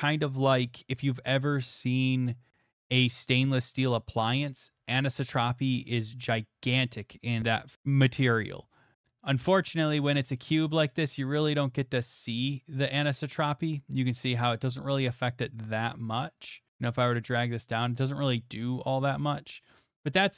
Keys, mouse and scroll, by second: 7.4-9.2 drag, 10.4 middle click, 11.5 click, 12.3 click, 14.1 click, 16.5 click, 16.7 click, 16.9 click, 18.2 click, 19.3 middle click, 19.7 middle click.